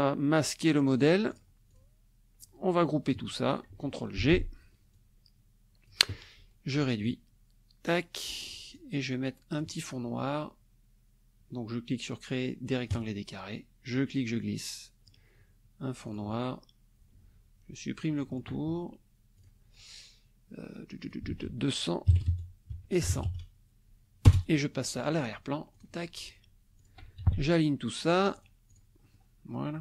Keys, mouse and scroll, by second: 0.9 click, 1.3 click, 1.7 click, 2.4-3.3 drag, 4.1 ctrl+g, 4.9-6.0 drag, 7.0-8.6 ctrl+drag, 8.7-9.8 ctrl+drag, 12.9 click, 13.9-15.3 drag, 16.1 click, 18.3 shift+click, 19.3 click, 21.0 ctrl+click, 21.3 ctrl+a, 22.1 KP_2, 22.7 Tab, 23.0 KP_1, 23.1 KP_0, 24.2 Return, 25.7 click, 26.8 shift+click, 27.2 ctrl+shift+a, 28.0 click, 28.7 click, 29.0 middle click.